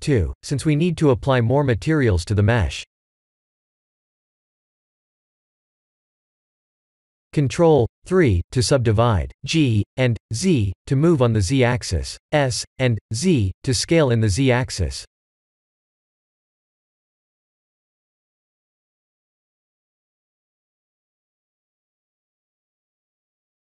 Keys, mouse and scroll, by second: 2.1 click, 2.4 shift+a, 6.3 KP_1, 7.6 ctrl+3, 8.1 s, 9.4 g, 11.3 s, 13.7 g, 15.3 Tab, 15.8 ctrl+r, 19.0 Tab, 19.9 s, 23.5 g.